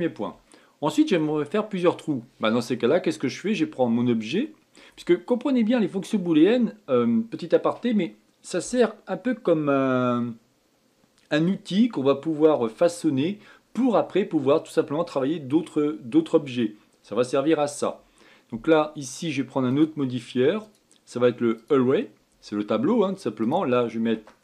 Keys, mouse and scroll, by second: 0.7-1.2 scroll down 3, 1.2-4.2 shift+middle drag, 20.4 click, 21.3-24.4 drag.